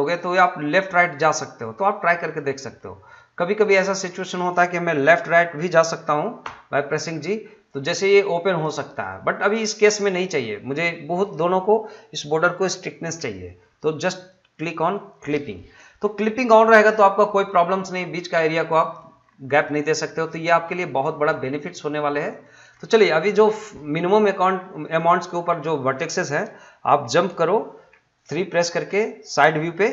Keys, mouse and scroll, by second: 2.6 middle click, 3.6 click, 4.1 middle click, 8.5 g, 9.4 right click, 10.1 middle click, 14.1 click, 15.3 middle click, 16.3 scroll up 1, 16.5 middle click, 19.2 scroll down 1, 19.5 middle click, 19.8 scroll up 1, 20.1 middle click, 21.0 scroll down 1, 21.3 middle click, 21.7 scroll up 1, 21.9 middle click, 24.6 scroll down 1, 24.8 middle click.